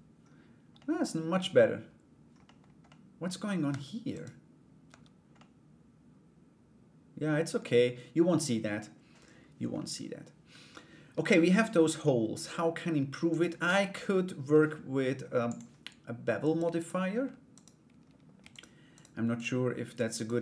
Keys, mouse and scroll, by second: 0.3 middle click, 2.0 middle click, 2.4 middle click, 3.3 Tab, 3.7 right click, 4.9 Tab, 4.9-7.2 middle drag, 9.3-11.5 middle drag, 12.9 right click, 13.2 Tab, 15.0 click, 16.0 right click, 16.3 alt+right click, 17.1 right click, 18.1 shift+right click, 18.5 shift+right click, 18.9 shift+right click, 19.7 shift+right click.